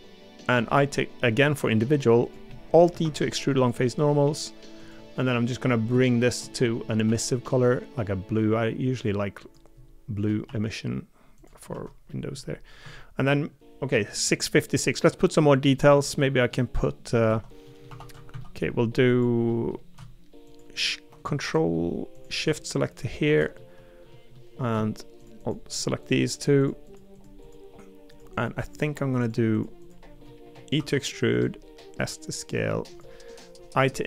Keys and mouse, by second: 2.5 middle click, 3.0 alt+e, 6.0 shift+middle click, 11.7 Tab, 12.1 middle click, 12.8 Tab, 14.0 middle click, 14.8 middle click, 15.4 middle click, 15.9 Tab, 16.2 middle click, 16.7 middle click, 17.3 Tab, 17.6 middle click, 17.9 3, 18.1 a, 18.3 a, 18.4 middle click, 19.5 middle click, 23.5 middle click, 24.3 middle click, 30.2 middle click, 31.8 s, 33.5 i.